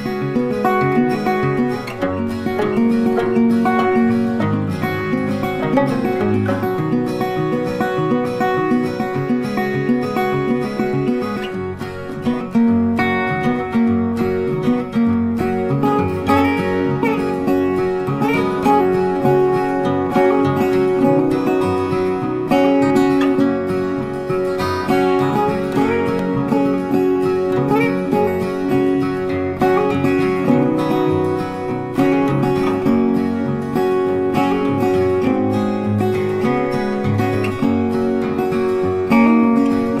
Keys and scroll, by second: 28.0 ctrl+t.